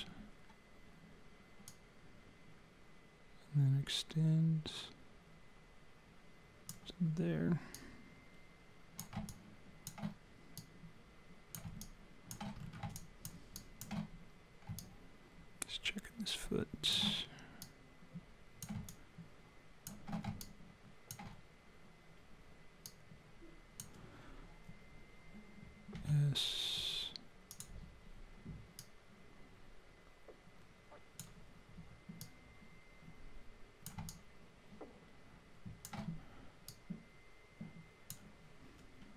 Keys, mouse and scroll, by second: 1.7 click, 7.7 click, 9.3 alt+click, 10.6 click, 11.8 alt+click, 12.6-13.5 scroll up 3, 13.0 alt+click, 13.5 alt+click, 14.8 alt+click, 17.6 click, 18.9 alt+click, 20.4 click, 22.9 click, 25.9 s, 28.8 click, 32.2 click, 34.1 alt+click, 36.7 click.